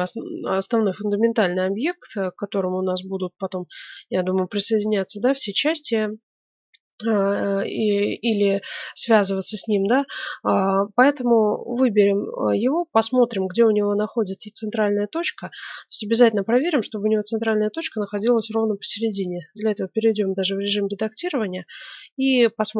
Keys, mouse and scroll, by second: 16.1-21.7 middle drag, 18.8 Tab.